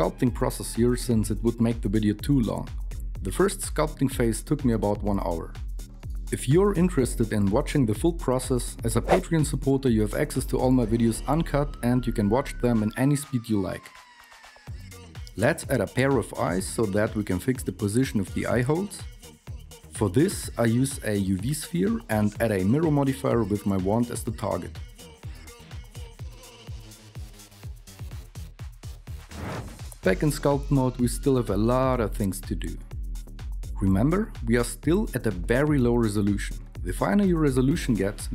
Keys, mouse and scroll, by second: 16.4 shift+a, 19.1-22.0 typing.